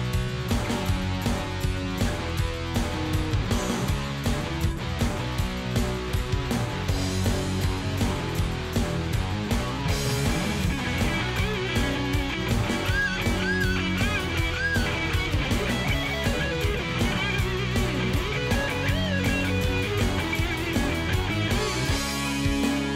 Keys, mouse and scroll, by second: 2.7 click, 3.9 ctrl+KP_5, 4.4 ctrl+KP_5, 6.3 click, 8.2 click, 9.0 click, 9.9 Right, 12.5 click, 13.4 click, 14.4 shift+click, 15.3 ctrl+g, 19.3 click, 22.0 click.